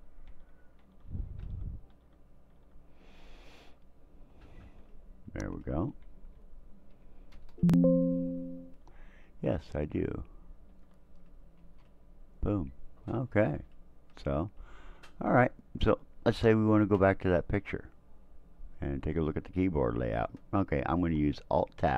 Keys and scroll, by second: 0.3 Tab, 0.8 Tab, 1.4 Tab, 1.9 Tab, 2.5 Tab, 3.1 Tab, 3.6 Tab, 4.7 Tab, 6.2 Down, 7.3 Return, 10.7 Tab, 11.6 Return.